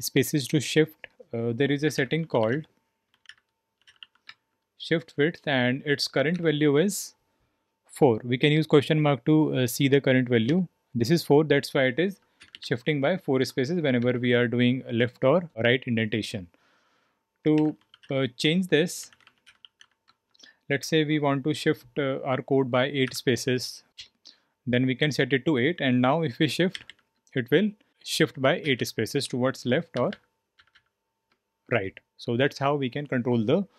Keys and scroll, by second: 0.0-33.7 typing, 10.4 Return.